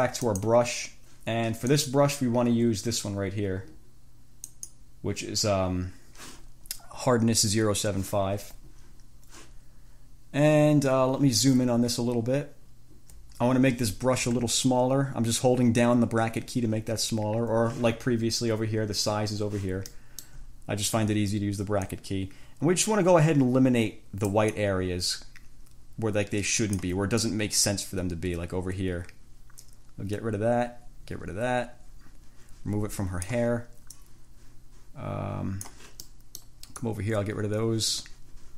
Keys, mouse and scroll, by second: 0.5 click, 1.9-5.1 drag, 12.2-12.6 ctrl+scroll up 2, 13.0 ctrl+scroll up 2, 14.6 [, 20.2 middle click, 20.3 click, 20.4 middle click, 20.6 [, 22.1-24.7 drag, 27.4-33.7 drag, 34.2-36.3 drag, 36.3 middle click, 36.6 click, 37.0-38.5 drag.